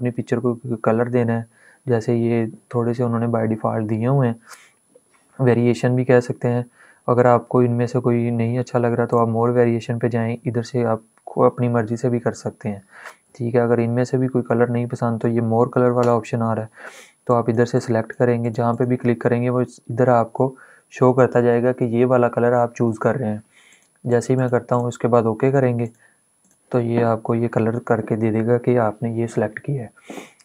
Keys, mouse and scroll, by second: 2.5-4.5 scroll down 1, 8.8 click, 15.9 click, 23.3 click.